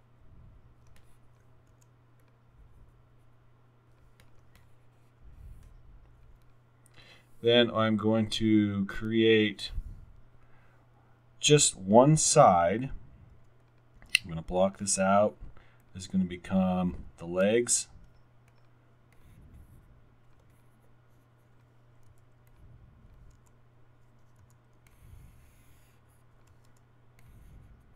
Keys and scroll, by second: 1.7 alt+w, 13.5 x, 22.1 alt+r, 22.9 alt+r, 23.5 w, 24.6 r, 26.5 w, 26.9 w.